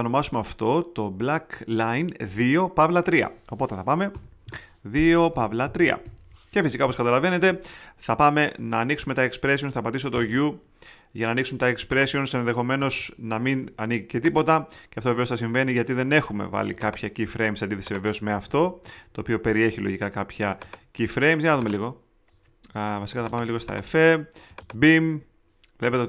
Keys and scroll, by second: 4.1 Return, 4.4 Right, 5.3 -, 5.6 3, 6.0 Return, 10.1 θ, 12.7 θ, 18.4 θ.